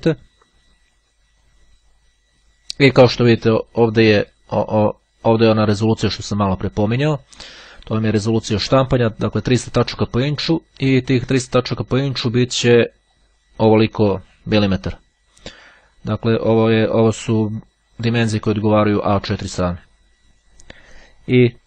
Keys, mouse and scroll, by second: 5.9-7.8 drag, 8.1-9.3 drag, 9.4 click, 12.5 click, 13.3 click, 15.5-16.6 drag, 17.1-18.3 drag, 18.7 click.